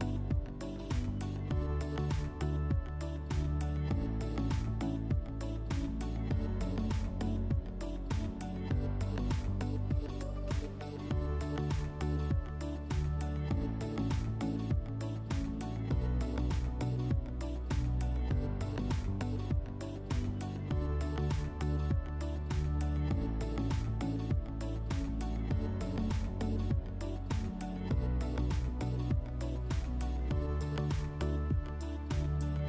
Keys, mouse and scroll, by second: 0.2 click, 0.6 click, 0.9 click, 1.2 click, 1.4 click, 2.2 click, 2.5 ctrl+click, 3.0 click, 4.2 click, 4.7 click, 8.8 click, 9.6 click, 11.1 alt+click, 12.8 alt+click, 13.8 alt+click, 16.1 alt+click, 20.3 alt+click, 21.3 alt+click, 21.8 alt+click, 23.9 right click, 24.3 click, 25.0 click, 25.6 right click, 26.2 click, 26.7 click, 27.0 alt+middle click, 27.2 F4, 27.9 click, 28.2 click, 29.7 click, 30.1 click, 30.8 click, 31.7 alt+1, 32.4 click.